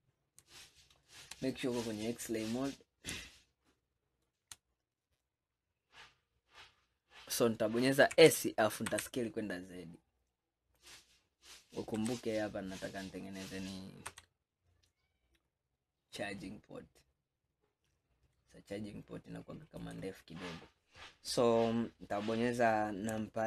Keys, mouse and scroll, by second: 0.6-1.9 shift+middle drag, 1.9-2.6 drag, 2.6 scroll up 1, 3.3-4.7 shift+middle drag, 4.7-7.9 scroll up 2, 8.2 s, 12.0 g.